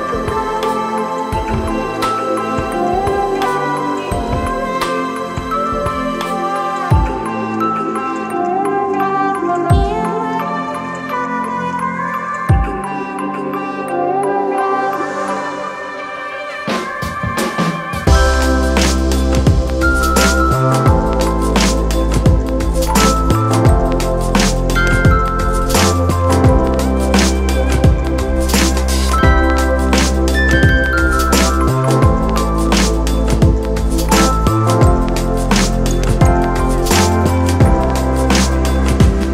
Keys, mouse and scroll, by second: 8.4 click, 10.2 ], 28.0 ].